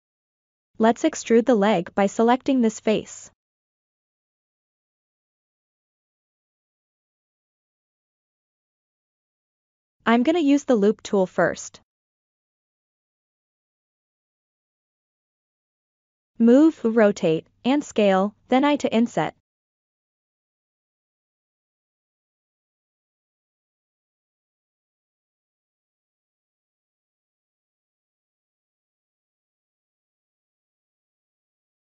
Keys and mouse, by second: 0.2 click, 1.2-3.7 middle drag, 4.2 KP_3, 5.3 ctrl+middle click, 6.1 shift+middle click, 9.2-10.7 right drag, 11.7 middle click, 12.5 e, 14.2 KP_1, 15.6 g, 16.2-17.5 drag, 17.8 r, 18.4-19.8 drag, 21.0 s, 21.5 click, 23.1-24.1 middle drag, 24.5 KP_3, 25.9 g, 26.2-27.5 drag, 28.2-29.4 drag, 30.4-31.5 middle drag.